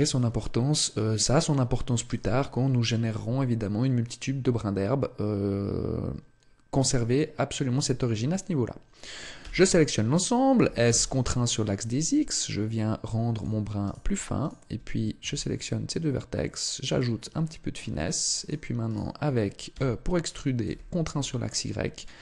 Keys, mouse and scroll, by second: 9.4 a, 9.6 a, 10.6 s, 13.4 click, 13.8 right click, 14.4 shift+right click, 15.2 s, 17.0 click, 17.4 shift+middle click, 18.4 right click, 18.9 shift+right click, 19.7 e, 22.0 click.